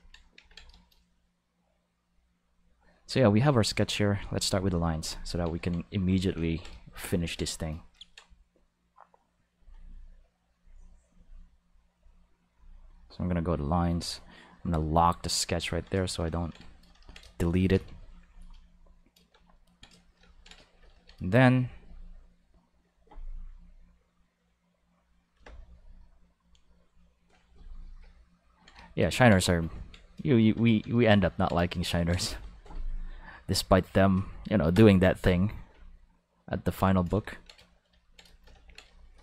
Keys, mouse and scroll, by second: 0.3 ctrl+s, 0.7 shift+middle click, 4.4 click, 6.0 click, 6.4 ctrl+middle click, 6.8 shift+middle click, 7.2 ctrl+middle click, 9.5 click, 10.5-12.0 drag, 12.5 click, 14.6 click, 16.6 shift+middle click, 17.1 middle click, 17.7 ctrl+s, 31.1 shift+middle click, 31.6 shift+middle click, 32.3 shift+middle click, 33.7 middle click, 34.7 Home, 35.9 ctrl+middle click, 37.0 middle click.